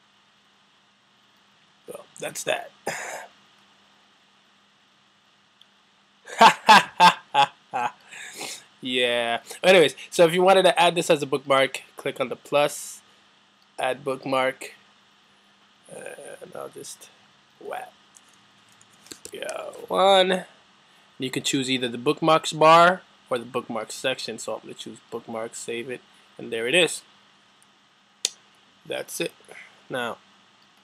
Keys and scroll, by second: 18.8-20.4 typing.